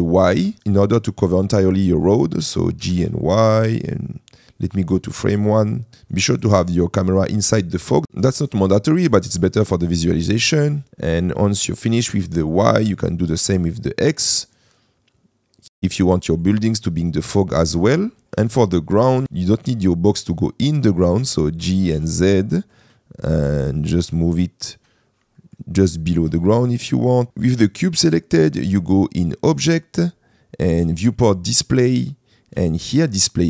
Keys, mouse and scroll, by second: 1.6 click, 2.9 g, 3.1 y, 5.2 click, 6.2 middle click, 6.8 shift+middle click, 9.8-10.9 drag, 11.4 middle click, 12.3 click, 13.6-15.6 drag, 15.6 middle click, 16.3 middle click, 18.2 shift+middle click, 18.7-19.2 middle drag, 21.2 g, 22.0 z, 25.5 middle click, 26.4-27.3 middle drag.